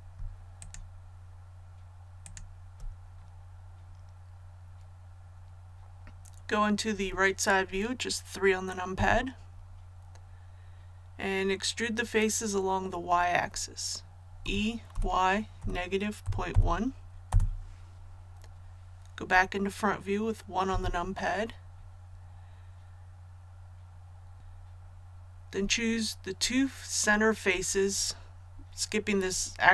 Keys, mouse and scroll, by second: 0.6 shift+right click, 2.2 shift+right click, 8.9 KP_3, 14.4-14.9 typing, 16.2 KP_Decimal, 16.5 KP_1, 17.3 Return, 20.7 KP_1.